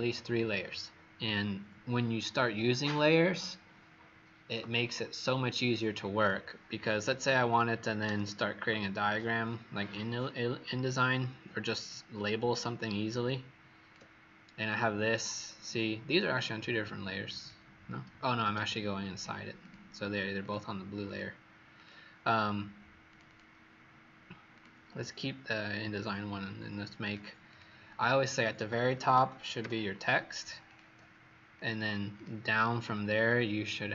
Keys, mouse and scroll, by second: 7.4 click, 7.9 Escape, 8.2 Escape, 10.2-11.5 scroll down 12, 12.3 alt+scroll up 3, 13.2 click, 16.2 click, 18.1 Escape, 18.4 Escape, 18.5 Escape, 19.1 click, 20.0 click, 20.4 click, 21.0 click, 21.7 click, 23.2 click, 24.5 click, 27.4 click, 28.8-30.0 typing, 30.6 click, 32.1 click.